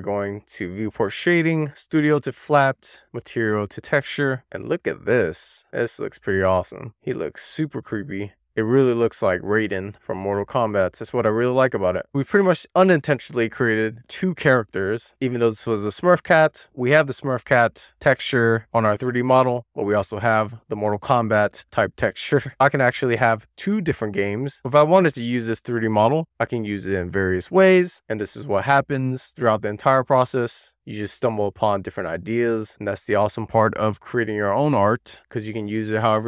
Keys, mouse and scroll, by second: 3.5 click, 3.8 Tab, 4.3 shift+middle click, 4.8 click, 5.1 middle drag, 5.4 scroll up 1, 5.6-9.9 middle drag, 9.9-10.8 scroll down 1, 12.4 click, 14.4 super+s, 14.7-16.4 drag, 17.2 middle click, 17.9-18.9 shift+middle drag, 19.7 click, 19.8 middle click, 20.1 scroll up 1, 20.3-24.5 middle drag, 24.6-26.2 scroll down 1, 27.2 click, 29.3 super+s, 29.4 click, 29.9 click, 30.2 Tab, 30.7 shift+middle click, 31.1 click, 31.5 middle drag, 31.8 scroll up 1, 31.9-36.2 middle drag.